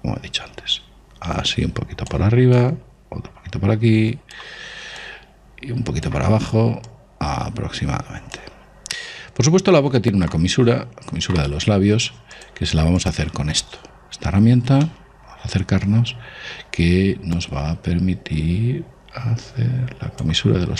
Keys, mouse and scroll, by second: 3.0 click, 12.8 click, 14.9-17.1 middle drag, 17.8 click.